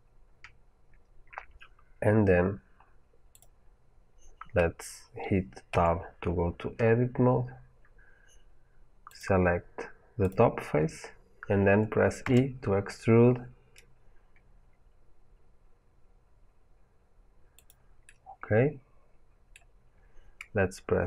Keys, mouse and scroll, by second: 3.2 click, 5.6 Tab, 7.0 scroll down 2, 9.0 click, 10.1 click, 12.1 e, 17.6 click, 17.9 middle click.